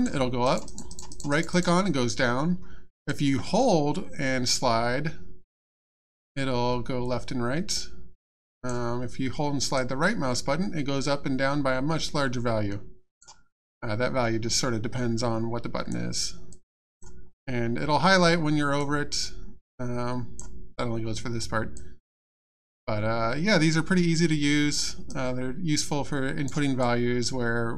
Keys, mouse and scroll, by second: 0.4 right click, 1.5 right click, 3.1 click, 9.7 right click, 13.6 click, 16.5 click, 18.8 click, 21.7 click, 25.1 right click, 26.8 click.